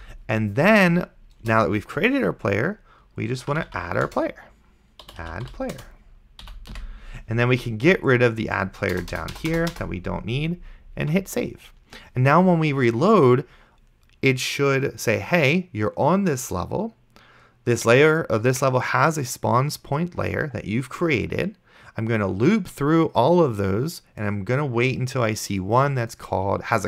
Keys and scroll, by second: 1.4 Return, 3.2-6.8 typing, 4.1 Return, 6.5 End, 9.0 BackSpace, 11.3 ctrl+s.